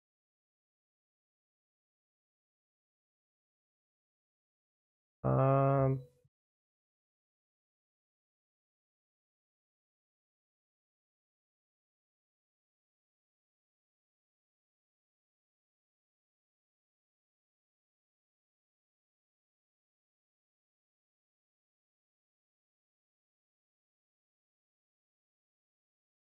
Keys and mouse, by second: 0.3-2.7 middle drag, 3.2 click, 8.2-9.4 drag, 9.4 middle click, 10.4 middle click, 11.4 shift+middle click, 14.0 click, 14.5 click, 14.9 click, 15.5 click, 16.2 click, 18.3 click, 19.6-20.8 middle drag, 21.0 shift+middle click, 21.5-23.5 middle drag, 25.2 middle click.